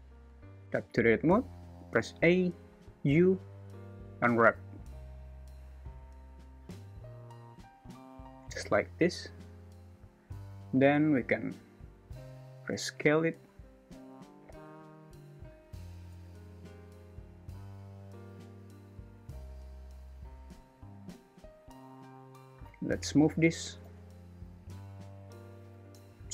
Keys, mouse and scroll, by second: 0.9 Tab, 1.7 a, 2.8 u, 10.8 a, 11.2 s, 14.1 g, 16.6 click, 22.9 click, 23.9 g, 25.4 shift+a.